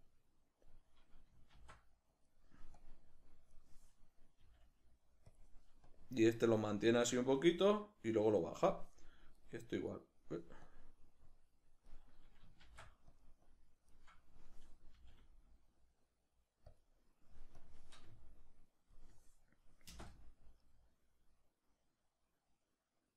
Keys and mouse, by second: 1.6 shift+d, 2.8-5.4 drag, 4.4 g, 5.9-9.4 drag, 9.4 right click, 9.9 right click, 10.6-13.2 drag, 12.6 shift+d, 13.4-16.8 drag, 15.0 g, 17.6-20.7 drag, 19.9 space.